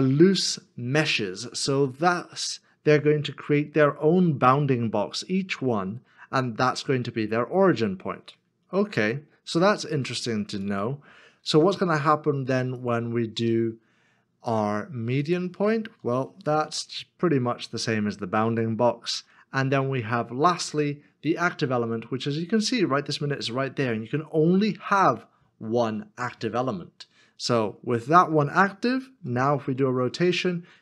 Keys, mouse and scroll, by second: 8.8 r, 9.3 z, 11.4 ctrl+z, 16.5 r, 19.1 r, 20.0 ctrl+z, 24.2 middle click, 29.5 r.